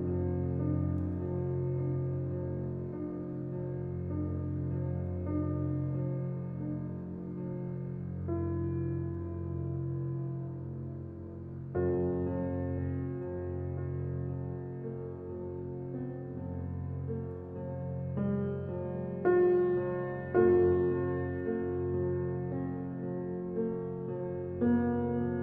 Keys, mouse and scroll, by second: 0.8-1.3 scroll up 4, 1.8 Tab, 2.1 click, 2.4 shift+click, 3.0 click, 5.5-6.1 scroll down 1, 6.1 right click, 6.8 click, 7.2 shift+click, 7.5 shift+click, 8.0 g, 10.4 click, 12.5 click, 12.8 Tab, 13.0-14.4 middle drag, 14.4-14.7 scroll down 2, 14.7 middle click, 15.1-15.5 scroll down 2, 15.5-17.1 middle drag, 17.3 shift+a, 18.9 g, 19.8 alt+middle click, 20.4 g, 21.5 g, 23.0 s, 24.2 s.